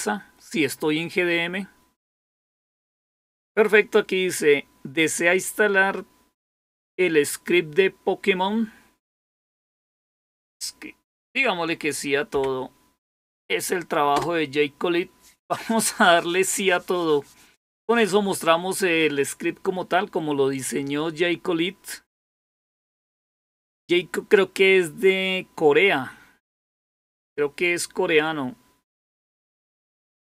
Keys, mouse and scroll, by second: 14.0 Return.